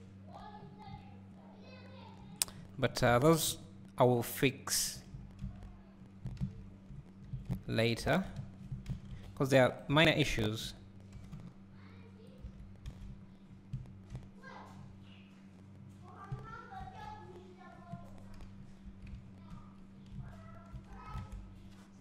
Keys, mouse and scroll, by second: 0.6 scroll up 2, 2.4-2.8 scroll down 1, 3.2 a, 3.8 click, 5.3 scroll up 1, 6.1 scroll down 1, 9.4 click, 9.4 c, 9.8 right click, 11.2 g, 13.5 scroll down 1, 18.4 KP_1, 18.8 KP_3, 19.5 ctrl+KP_1, 21.2 alt+a.